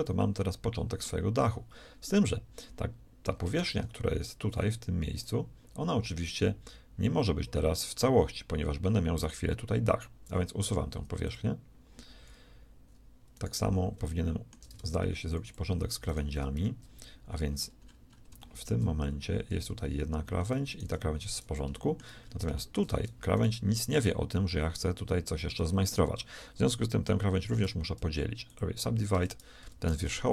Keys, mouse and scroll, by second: 0.3 middle click, 3.5 ctrl+Tab, 5.2-8.5 right drag, 10.5 x, 13.3-14.7 right drag, 14.7 ctrl+shift+Tab, 15.5-16.7 drag, 16.1 right click, 16.5 shift+c, 17.7 middle click, 19.8 shift+g, 20.9 g, 23.9 g, 27.6 w, 29.1 Tab, 29.6 Tab.